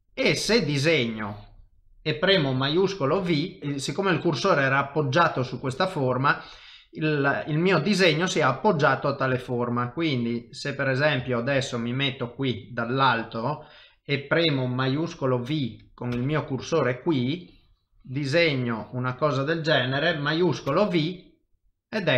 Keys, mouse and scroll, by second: 0.2 click, 3.4 shift+v, 9.2 middle click, 11.3 ctrl+middle click, 11.6 shift+middle click, 12.9 middle click, 16.2 shift+v, 17.2 click, 21.5 middle click.